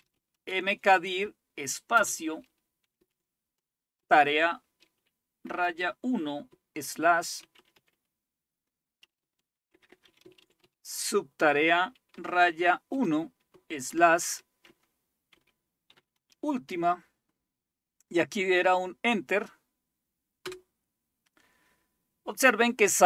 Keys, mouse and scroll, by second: 0.0-0.6 typing, 1.9-4.0 typing, 5.4-5.7 typing, 6.8-7.8 typing, 9.0-12.9 typing, 13.9-16.7 typing, 20.4 Return.